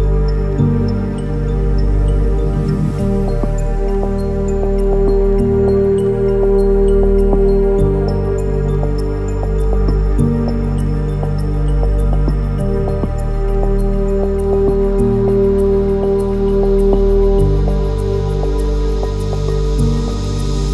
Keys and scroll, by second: 4.6 ctrl+-, 4.7 ctrl+-, 4.9 ctrl+-, 6.4 ctrl+-, 7.6 ctrl+-, 8.7 ctrl+-, 10.4 ctrl++, 18.2 ctrl+z.